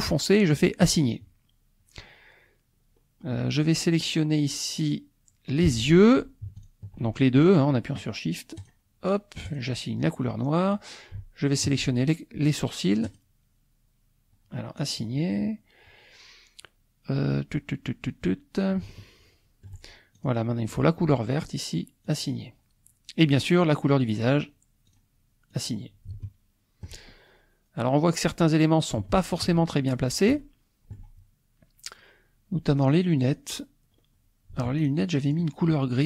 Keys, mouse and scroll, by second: 0.8 click, 3.0 middle click, 5.7 click, 6.7 shift+click, 8.6 click, 9.5 click, 10.8 click, 11.7 shift+click, 13.0 click, 14.8 click, 18.9-20.1 shift+drag, 20.2 click, 21.5 click, 22.1 click, 23.2 click, 24.9 click, 25.5 click, 26.2 shift+click, 27.6-29.0 scroll down 2, 29.1 shift+click, 30.4-31.5 shift+drag, 31.6 scroll up 1, 32.9 click, 33.9-34.5 scroll up 1, 34.9 shift+click, 35.2 shift+click.